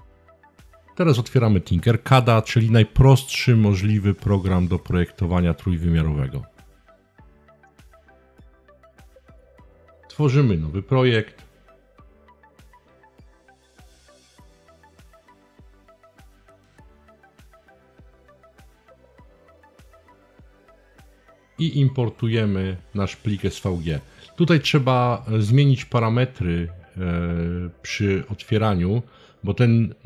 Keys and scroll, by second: 0.0-2.8 typing, 4.7 typing.